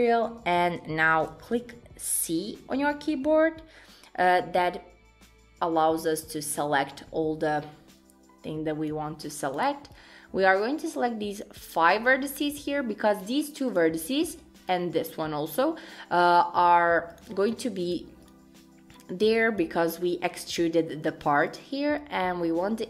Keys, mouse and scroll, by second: 0.0 shift+middle click, 1.5 c.